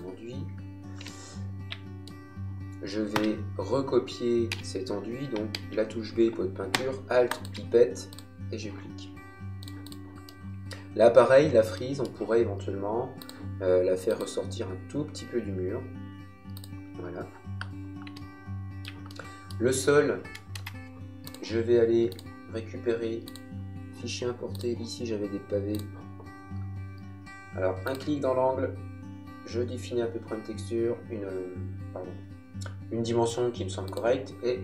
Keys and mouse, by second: 1.6 middle click, 4.5 b, 7.3 alt+click, 10.2 middle click, 11.8 middle click, 13.2 click, 16.6 click, 19.0 shift+middle click, 20.6 space, 21.2 click, 26.8 middle click, 27.8 click, 33.8 click.